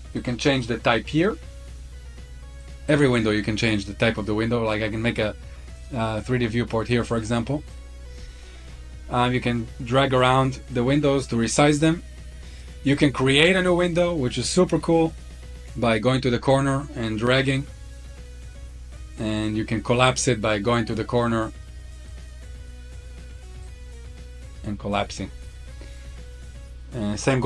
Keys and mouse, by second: 0.1 click, 3.6-5.8 drag, 6.9-7.7 drag, 10.6-12.6 drag, 16.4-18.1 drag, 20.2-22.1 drag, 23.6 click.